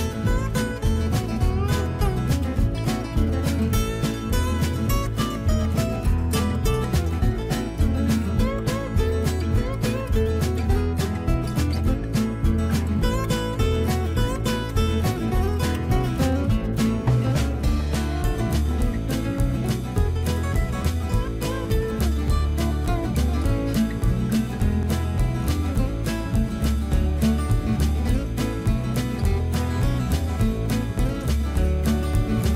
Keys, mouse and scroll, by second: 10.3 middle click, 10.3-12.8 middle drag, 18.8-21.6 middle drag, 21.6 e, 25.2 y, 26.6 z.